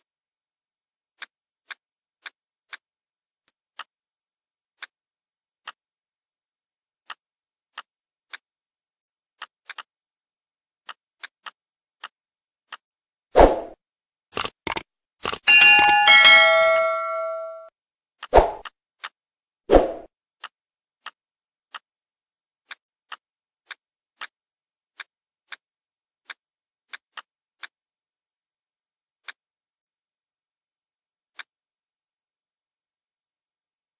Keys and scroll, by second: 1.5 ctrl+z, 9.0 ctrl+z, 14.2 ctrl+z, 25.2 ctrl+x, 30.8 Delete.